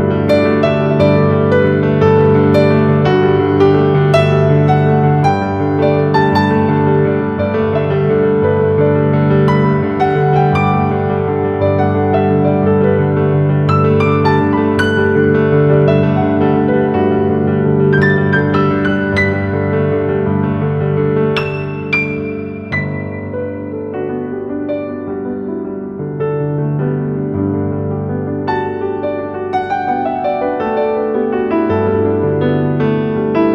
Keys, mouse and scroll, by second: 0.8-1.6 typing, 1.0 click, 2.3 right click, 3.1-14.8 drag, 14.8-16.6 typing, 15.0 click, 16.1 click, 16.4 click, 16.9 click, 19.4-22.3 alt+shift+drag, 23.0 right click, 23.9-32.6 drag, 32.6-33.5 typing, 33.0 click.